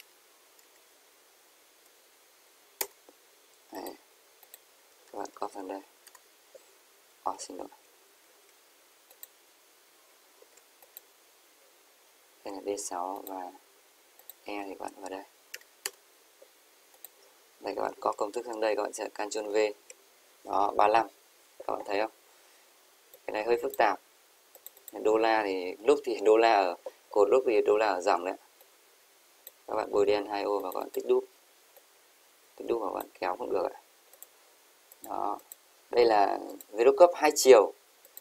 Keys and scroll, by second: 5.3 ctrl+c, 5.8 Left, 6.1 Return, 7.7 ctrl+x, 8.4 ctrl+x, 10.4 ctrl+z, 18.5 Right, 19.8 ctrl+v.